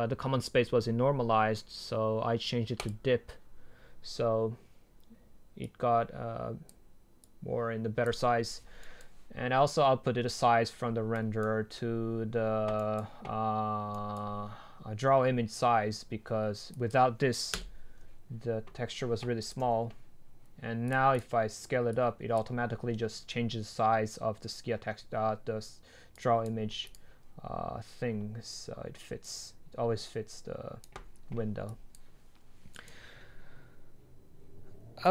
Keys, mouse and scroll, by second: 2.9-5.1 drag, 5.8-8.8 drag, 8.8 right click, 16.9 click, 17.6 Delete, 19.4 click, 19.6 ctrl+z, 20.9-24.5 drag, 26.5-29.1 drag, 29.7-32.7 drag, 32.7 right click.